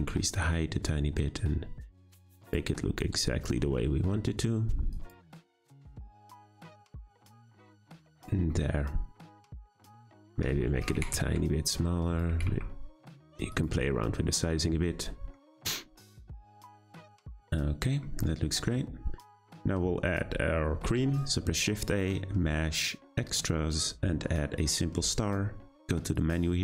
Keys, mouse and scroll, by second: 3.6 s, 5.1 Tab, 5.6 g, 7.1 g, 8.2 click, 8.5-9.7 middle drag, 9.7 click, 10.1 scroll up 2, 10.3 Tab, 10.6 a, 10.7 s, 12.3 s, 13.7 Tab, 14.0-15.3 middle drag, 15.3-15.6 scroll down 2, 15.6 click, 16.0-16.4 scroll down 2, 16.4-18.1 middle drag, 18.1-19.2 scroll up 3, 19.2-20.8 scroll down 2, 20.8 shift+a, 26.1-26.6 drag.